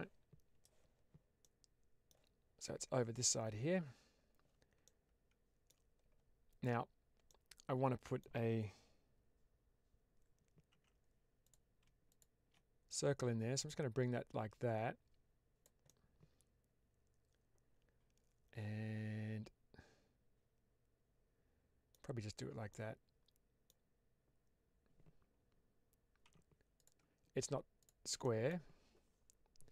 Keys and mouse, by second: 1.3 middle click, 3.1 click, 3.6 Tab, 4.7 middle click, 7.1 middle click, 12.0 shift+click, 12.8-15.5 drag, 15.7-21.8 middle drag, 22.6-23.6 middle drag, 26.3 3, 26.6 click, 28.1 middle click.